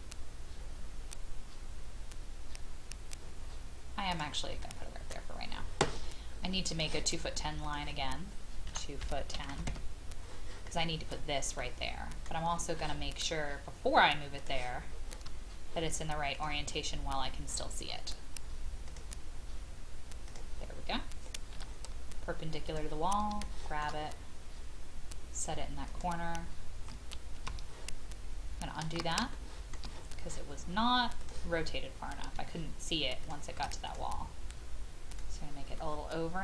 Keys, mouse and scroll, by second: 4.1 click, 4.6 middle click, 6.7 click, 8.7 KP_2, 9.3 KP_1, 9.5 KP_0, 11.5 middle click, 14.4 click, 16.3 shift+click, 17.4-18.9 scroll up 1, 18.9 click, 21.5 m, 22.6 click, 25.9 click, 27.3 ctrl+z, 28.8 ctrl+z, 29.3 shift+middle click, 31.2 click, 33.8-34.9 drag, 35.7-36.4 middle drag.